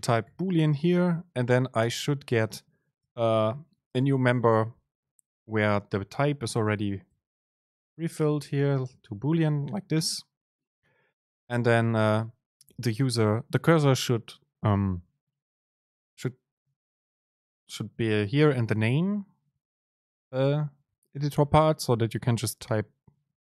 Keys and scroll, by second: 1.9 Return, 2.0 Return, 3.1 super+space, 5.1 Right, 5.8 Left, 7.2 BackSpace, 12.8 Home, 18.8 Up, 18.9 Down, 20.1 Up, 20.3 Down.